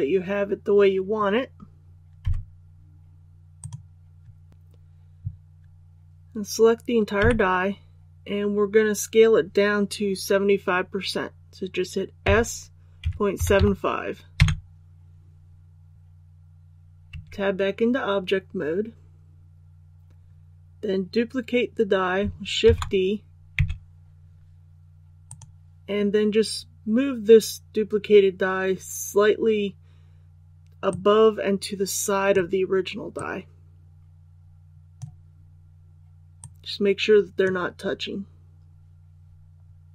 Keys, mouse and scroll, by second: 2.2 z, 3.5 click, 7.1 a, 12.2 s, 13.0 KP_Decimal, 13.3 KP_7, 13.5 KP_5, 17.1 Tab, 22.6 shift+d, 25.2-37.9 drag, 39.6 scroll down 1.